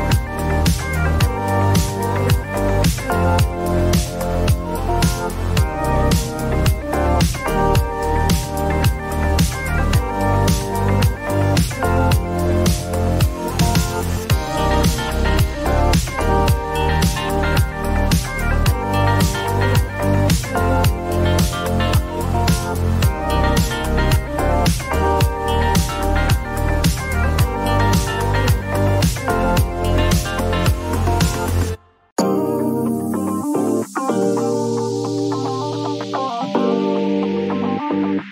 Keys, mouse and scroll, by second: 0.0-0.9 typing, 2.2 click, 4.1-5.6 drag, 4.4-5.2 typing, 6.9 click, 7.2-8.6 typing, 10.3 click, 10.4 click, 12.3 click, 12.8-14.3 typing, 14.6-16.5 drag, 15.4-16.3 typing, 17.1 click, 17.5 typing, 17.5 click, 19.3 click, 20.3 ctrl+d, 22.7 click, 24.6 click, 25.3 2, 25.5 Return, 27.4 click, 28.1 8, 28.7 Return, 30.9 click, 32.1-33.7 drag, 35.4-36.6 drag, 37.9 click, 38.2-38.3 typing.